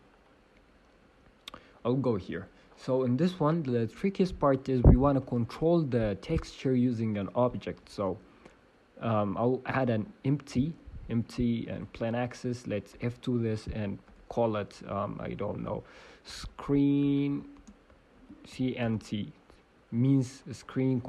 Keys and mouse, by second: 0.5 KP_1, 2.9-4.0 drag, 3.2 Tab, 5.2 shift+s, 5.5 Tab, 12.9 F2, 19.9 e.